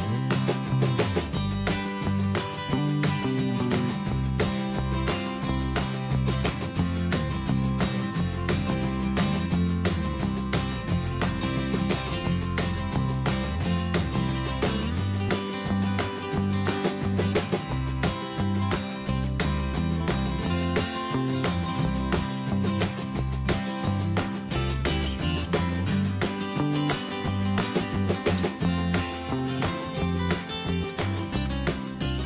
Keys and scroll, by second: 3.5 Escape, 10.1 ctrl+g.